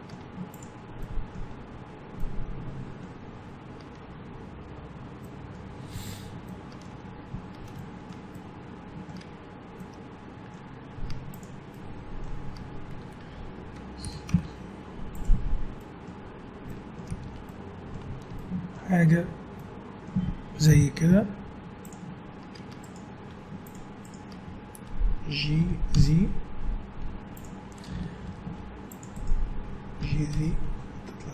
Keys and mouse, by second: 0.2 Tab, 1.0-3.6 middle drag, 5.9 middle click, 6.9 Tab, 11.1 Tab, 14.0 s, 15.3 Tab, 17.1 a, 20.7 KP_1, 21.1 z, 22.7 Tab, 23.3 Tab, 25.6 g, 28.2 ctrl+r, 30.0 g.